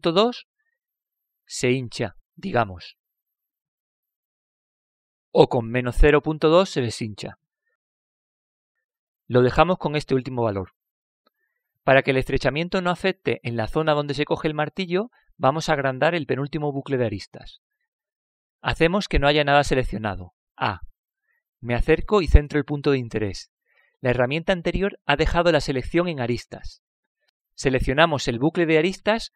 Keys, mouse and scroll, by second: 0.0-2.0 drag, 6.8-9.7 drag, 11.9-13.9 middle drag, 19.3-21.2 scroll up 1, 21.2-21.5 scroll up 1, 21.5 a, 22.5 middle click, 23.8-25.8 middle drag.